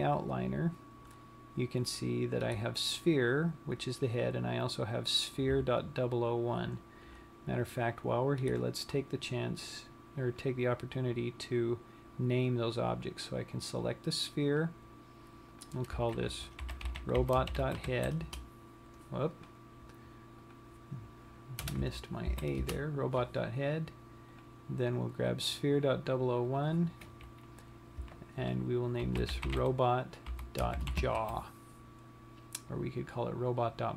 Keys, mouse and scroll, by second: 11.1 click, 15.3 click, 16.2 click, 20.0 click, 24.9 click, 27.5 click.